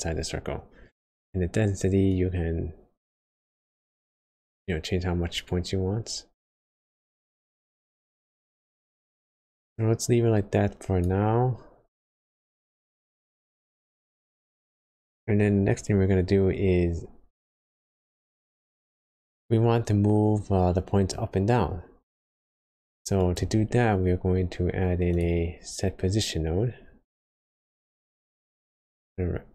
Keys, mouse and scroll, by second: 2.1 click, 8.8 click, 12.1 click, 16.8-17.6 scroll up 1, 17.8 click, 21.1 middle click, 22.1-22.7 scroll up 1, 23.2 click.